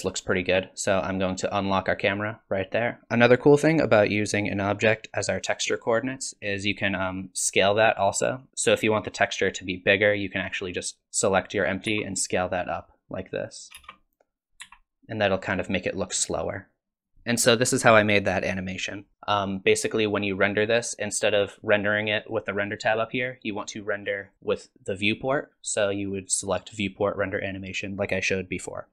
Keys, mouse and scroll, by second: 2.0 click, 8.5 s, 10.8 click, 11.9 s, 13.8 space, 14.6 s, 17.1 space, 19.1 click, 22.2 click, 24.3 click.